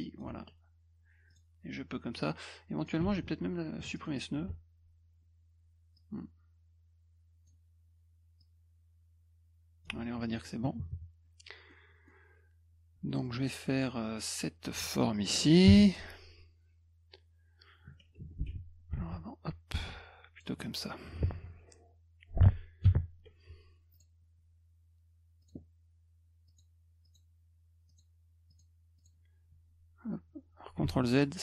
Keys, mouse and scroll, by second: 1.3 click, 2.2 click, 3.9 ctrl+alt+click, 6.0-7.5 drag, 8.4-9.8 drag, 10.2 F1, 11.7 middle click, 13.2 middle click, 15.7 b, 18.2 F2, 19.0 a, 19.7 click, 23.9 click, 25.4 click, 26.5 click, 27.0 click, 27.9 click, 28.5 click, 29.0 click.